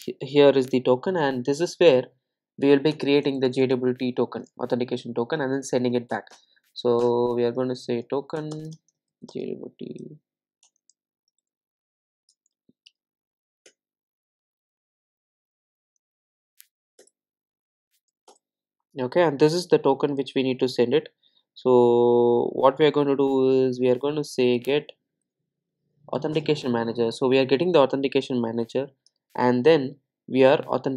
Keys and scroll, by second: 6.2 Return, 13.7 Return, 26.4 Return.